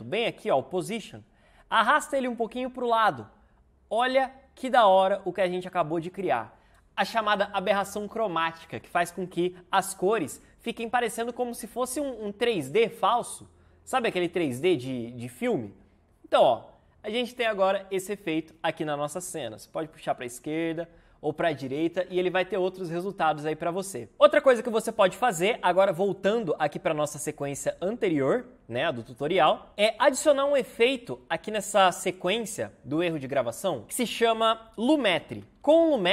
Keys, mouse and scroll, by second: 33.8 Return, 34.5-36.0 typing.